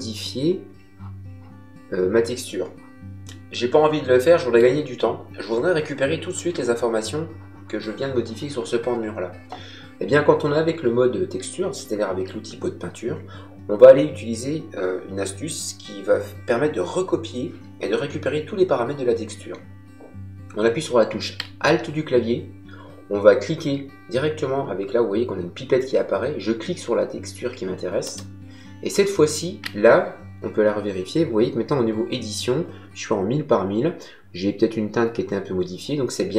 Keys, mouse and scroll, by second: 3.2 middle click, 27.9 alt+click.